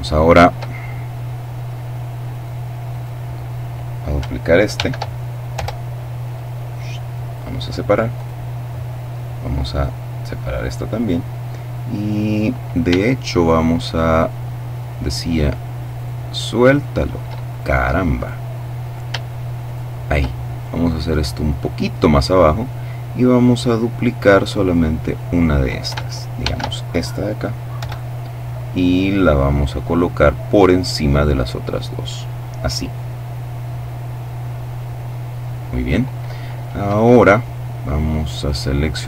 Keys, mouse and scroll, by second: 0.4-0.9 shift+scroll up 1, 1.9 right click, 4.3 shift+d, 5.1 Return, 5.9-7.4 drag, 7.7 right click, 9.4-11.0 drag, 13.0 shift+right click, 13.7 right click, 15.0 right click, 16.2 right click, 17.0 right click, 17.7 right click, 19.2 shift+right click, 20.2-22.1 shift+drag, 24.1 right click, 25.9 shift+d, 27.3 Return, 28.3-29.9 drag, 30.0-31.7 drag, 38.0 right click.